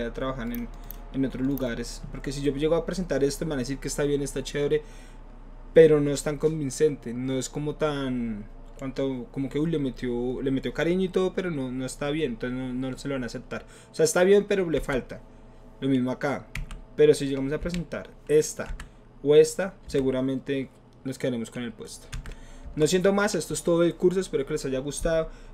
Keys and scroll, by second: 14.8 Right, 19.8 Left, 22.1 Right, 22.6 Left.